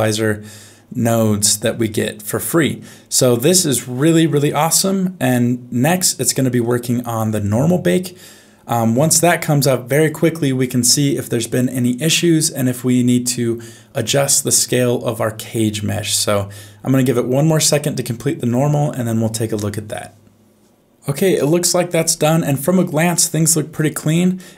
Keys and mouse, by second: 23.1 middle click.